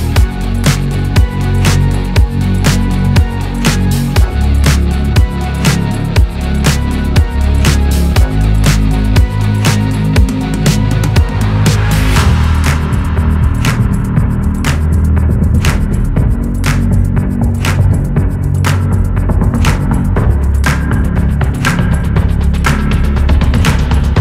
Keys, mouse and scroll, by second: 0.0 middle click, 0.4-4.2 scroll down 4, 4.2 middle click, 4.4 scroll up 4, 4.7-14.0 middle drag, 14.0 scroll down 1, 14.3-20.2 middle drag, 20.2-20.6 scroll up 1, 20.6-22.6 middle drag, 24.0 click.